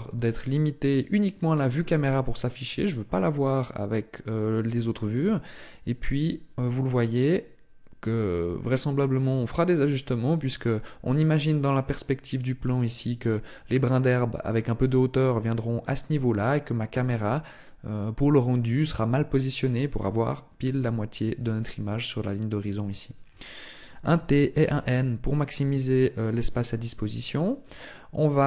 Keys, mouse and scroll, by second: 23.8 t, 24.4 n, 25.3-26.0 scroll down 5, 25.7 scroll up 1, 26.5-27.0 scroll up 2.